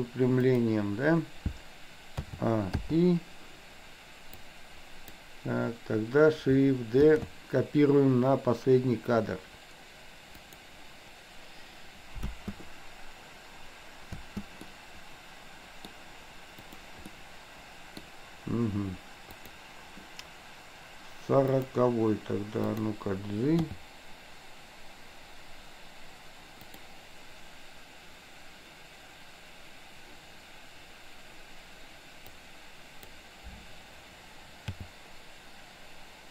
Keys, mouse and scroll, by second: 2.3 a, 2.9 i, 4.4-5.1 drag, 7.0 shift+d, 12.3 space, 14.1 space, 14.8-15.9 middle drag, 17.1-18.0 middle drag, 19.5 drag, 21.5 click, 23.8 g, 32.5 click, 34.8 g.